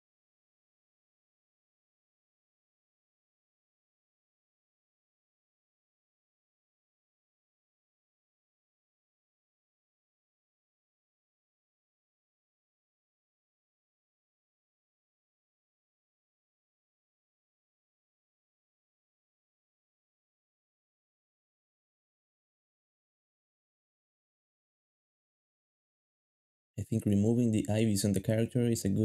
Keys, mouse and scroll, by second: 0.0-9.2 typing, 8.6 shift+middle click, 10.1 ctrl+Tab, 10.9-16.3 typing, 13.7 shift+middle click, 17.5 ctrl+b, 17.8 ctrl+b, 19.4-23.7 typing, 22.6 shift+middle click, 24.6 shift+middle click, 24.8 g, 25.5 ctrl+b, 26.0 g, 26.6 x, 27.5 alt+a, 28.1 shift+middle click, 28.8 ctrl+b.